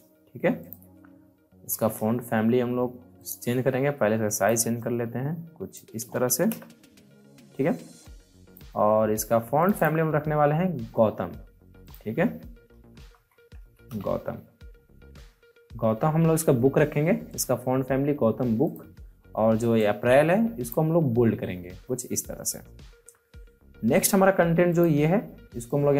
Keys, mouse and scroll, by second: 0.5 click, 0.6 click, 1.5 ctrl+t, 3.1 click, 3.1-6.4 drag, 6.4 Return, 7.9-9.6 drag, 12.5-14.3 typing, 17.2-21.8 drag, 23.9 click.